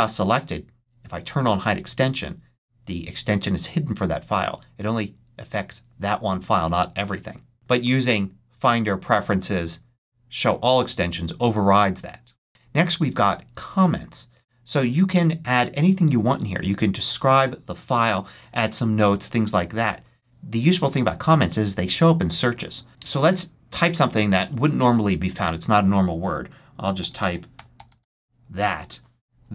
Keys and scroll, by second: 26.5-28.4 typing, 28.5 Return.